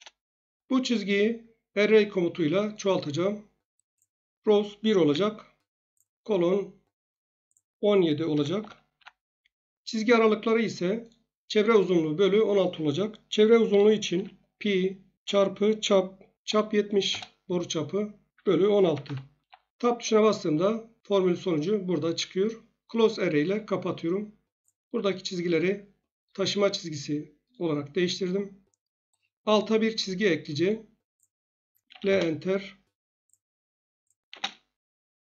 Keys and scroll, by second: 5.1 1, 8.3 1, 8.6 7, 8.9 Tab, 13.7-14.1 typing, 15.2 typing, 16.4-17.0 typing, 18.4-19.0 typing, 19.4 Tab, 27.9 Escape, 31.9 1, 32.0 Return, 34.2 space.